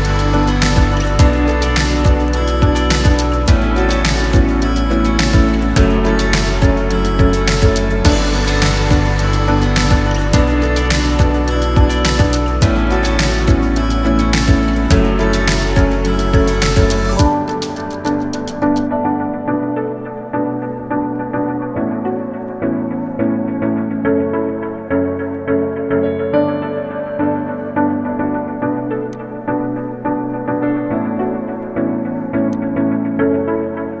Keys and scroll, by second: 0.1 ctrl+d, 5.9 ctrl+d, 10.3 ctrl+alt+shift+e, 21.2 ctrl+alt+shift+e.